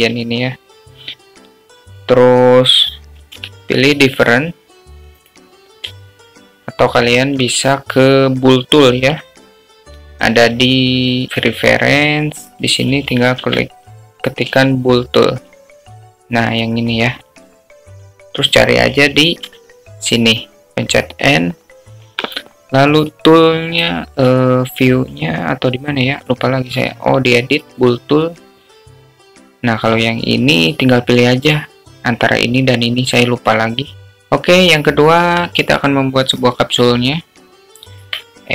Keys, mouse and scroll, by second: 0.8 alt+middle click, 5.6 q, 8.1-9.4 alt+middle drag, 12.0-13.8 drag, 21.4 n, 25.1 click, 25.2 click, 26.2 click, 28.3 click, 29.9 click, 33.9 Delete, 35.2 shift+a.